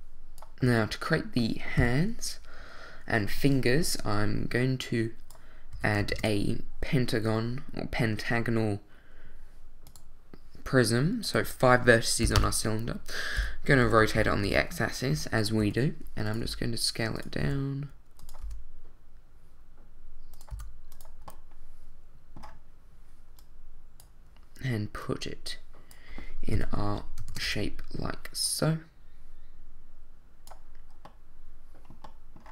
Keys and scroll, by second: 0.6 z, 1.8 1, 5.7 a, 12.2 5, 12.4 Return, 13.4 r, 13.8 x, 14.0 9, 14.1 0, 14.4 Return, 15.6 s, 16.4 g, 17.4 s, 18.4 g, 20.5 s, 27.3 shift+d.